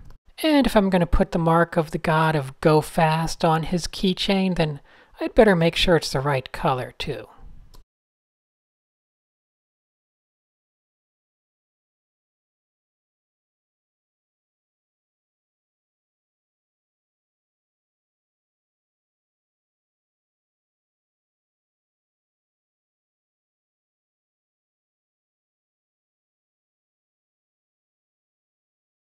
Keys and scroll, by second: 5.3 a, 5.9 alt+super+a, 6.4 shift+super+a, 7.1 x, 9.2 alt+super+a, 10.5 alt+super+s, 11.6 alt+super+s, 13.9 shift+super+a, 14.1 super+0, 14.3 shift+super+a, 14.8 Tab, 16.1 Tab, 16.6 a, 17.0 Tab, 17.0 n, 17.8 super+z, 20.0-20.4 typing, 20.8 super+h, 22.8 shift+0, 23.5 shift+0.